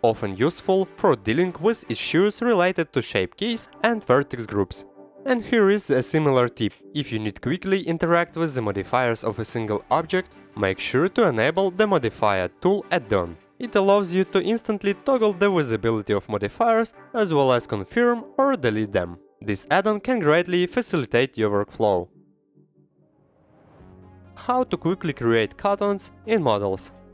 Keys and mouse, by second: 0.6 shift+click, 1.6 shift+click, 3.4 click, 3.9 ctrl+z, 4.4 ctrl+z, 5.2 /, 5.2 q, 5.3 click, 5.6 click, 6.0 click, 6.5 shift+click, 7.0 click, 7.3 click, 8.0 click, 10.2 click, 16.2-17.2 drag, 17.2 middle click, 18.4 middle click, 19.0-20.8 drag, 20.8 middle click, 22.9-23.5 drag, 25.3 middle drag, 26.4-27.1 drag.